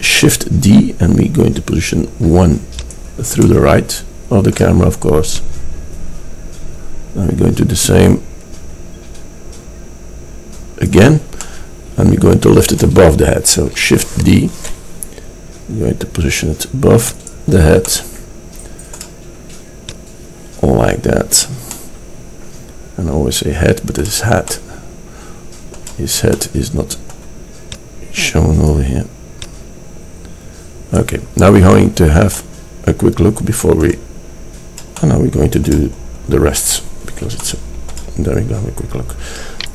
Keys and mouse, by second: 3.5 drag, 5.4-7.9 drag, 11.5-12.4 middle drag, 14.3 shift+d, 27.8 click, 31.6-32.5 middle drag.